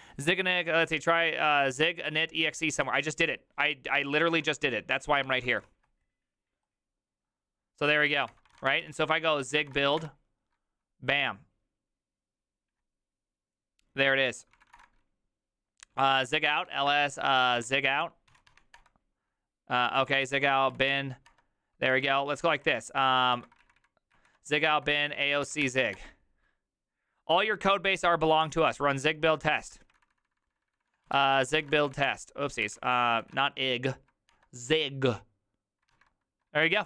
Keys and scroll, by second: 2.9 alt+{, 4.3 ctrl+a, 4.5 c, 5.0 ctrl+a, 5.2 1, 5.4 ctrl+c, 8.1 ctrl+c, 8.2 ctrl+:, 8.2-10.5 typing, 8.3 Return, 8.5 ctrl+a, 8.8 ctrl+c, 9.0 ctrl+c, 14.5-15.2 typing, 16.7-18.8 typing, 20.0 Up, 20.1-20.8 typing, 20.9 Tab, 21.3 Return, 21.9 Up, 22.4 ctrl+Left, 22.6 ctrl+Left, 22.7 ctrl+Left, 23.0 ctrl+w, 23.3 typing, 23.6 ctrl+Right, 23.8 ctrl+Right, 24.1 ctrl+Right, 24.6-26.0 typing, 30.0 ctrl+w, 30.1 ctrl+w, 30.2 ctrl+w, 30.4 ctrl+w, 30.8-32.5 typing, 32.6 Up, 32.8 ctrl+Left, 32.9 ctrl+Left, 33.1 ctrl+Left, 33.2 ctrl+Left, 33.3 ctrl+z, 33.9 z, 34.3 Return.